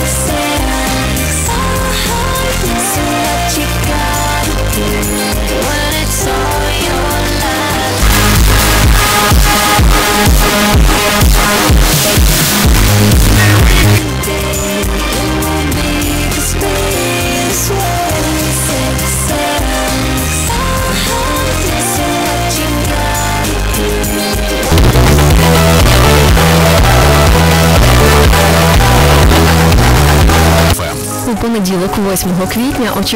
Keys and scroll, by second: 0.3 Down, 1.5 Return, 14.1 Page_Down, 31.4 Page_Down.